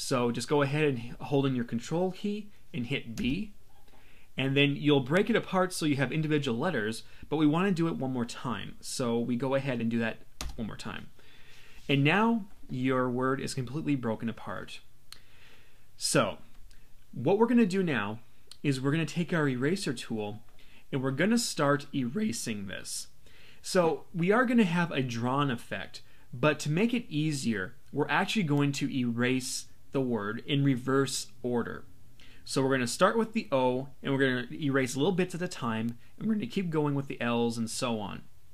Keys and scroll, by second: 3.1 super+b, 10.4 super+b.